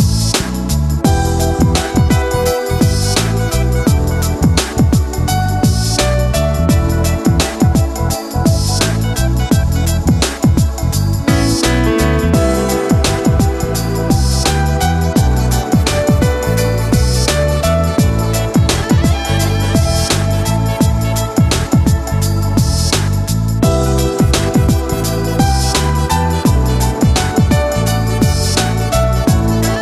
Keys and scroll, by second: 15.5 ctrl+a.